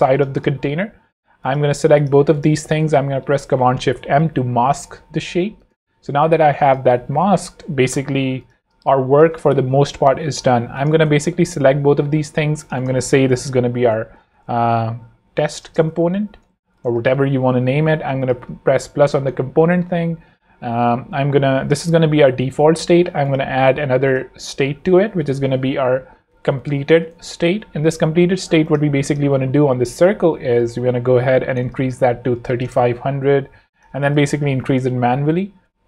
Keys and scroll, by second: 0.3 z, 0.8 v, 3.5 shift+super+m, 4.2 shift+super+v, 6.4 z, 7.0 v, 8.7 space, 11.3 shift+super+g, 12.1 super+g, 13.6-16.7 typing, 16.9 Return, 25.6-27.6 typing, 28.2 super+Return, 31.1 super+a, 31.8 super+3, 31.9-32.8 typing, 34.1 shift+Up.